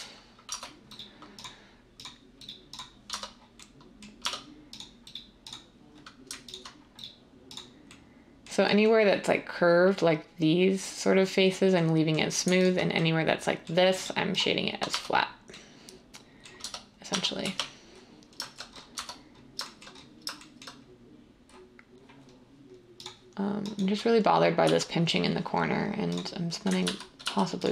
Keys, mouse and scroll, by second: 0.4 Tab, 3.1 Tab, 4.3 Tab, 14.9 Tab, 16.6 Tab, 17.1 Tab, 17.4 1, 18.9 Tab, 24.6 x, 26.8 ctrl+z, 27.2 x.